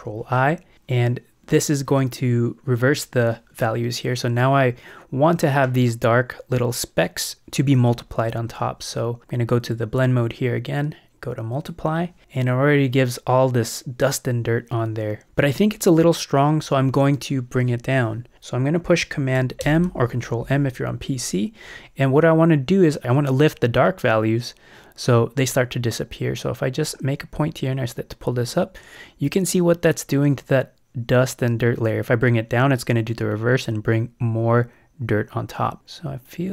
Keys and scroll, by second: 19.6 super+m.